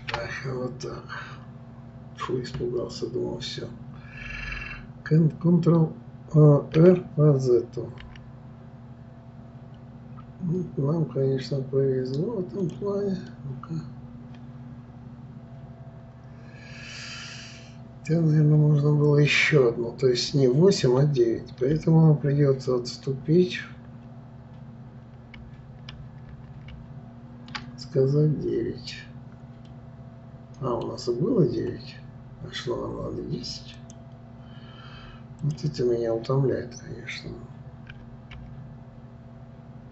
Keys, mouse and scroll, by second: 13.3-16.3 middle drag, 25.3 ctrl+z, 25.9 ctrl+z, 29.7-32.7 middle drag, 33.8 click, 35.4 click, 37.9 r.